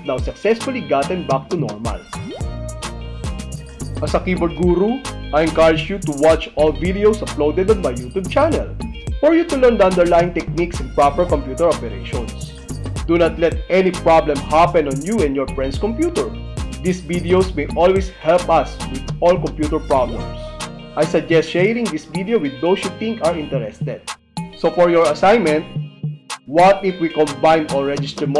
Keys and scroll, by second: 2.1 ctrl+w.